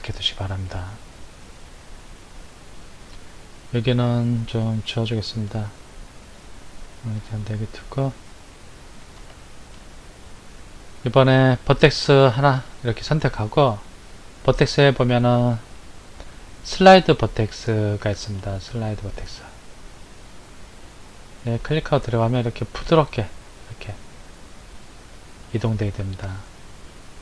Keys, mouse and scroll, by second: 3.1 click, 6.4 click, 7.5-10.3 shift+middle drag, 10.3-10.9 scroll up 2, 12.3 click, 14.3-17.4 drag.